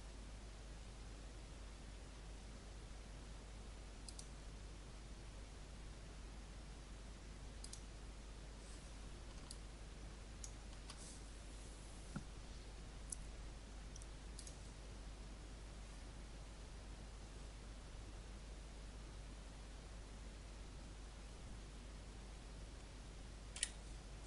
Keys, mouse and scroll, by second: 9.4 alt+click, 14.3 click, 16.1 click, 23.5 Escape.